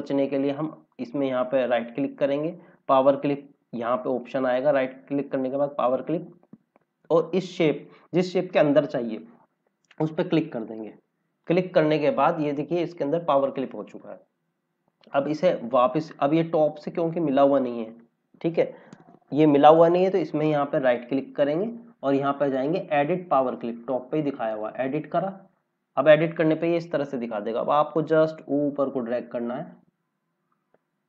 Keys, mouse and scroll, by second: 0.8 right click, 5.8 click, 9.8 click, 11.3-12.1 scroll down 1, 12.3 scroll up 1, 16.0 click, 16.7 scroll up 1, 17.7-19.5 scroll down 1, 20.3 right click, 24.4 click, 26.6 click.